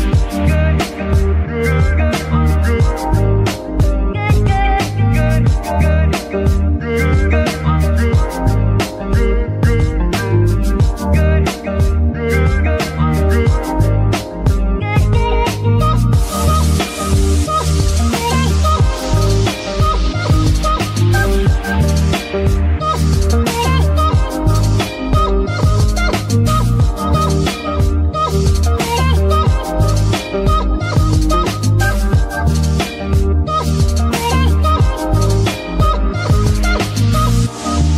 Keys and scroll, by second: 1.0 ctrl+r, 5.5 g, 10.2 KP_1, 14.3 ctrl+r, 23.2 KP_1, 31.5 g, 36.8 [.